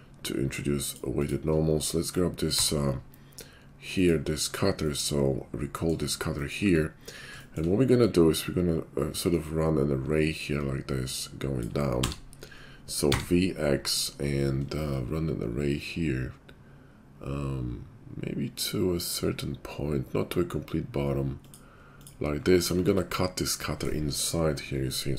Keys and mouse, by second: 2.5 d, 6.6 `, 9.3-25.1 drag, 22.8 shift+2.